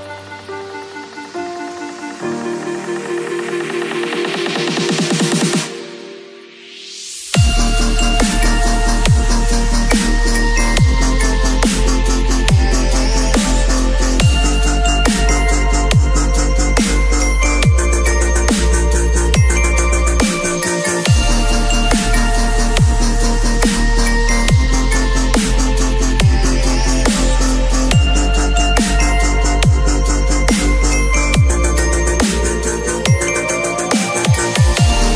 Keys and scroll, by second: 3.8 Return, 7.0 ctrl+s, 7.5 space, 8.4 ctrl+a, 8.6 ctrl+c, 8.9 ctrl+w, 9.3 ctrl+v, 9.6 ctrl+t, 16.6 space, 17.8 ctrl+l, 21.2 Return, 24.0 b, 25.2 [, 28.1 v, 29.9 ctrl+v, 30.4 ctrl+t.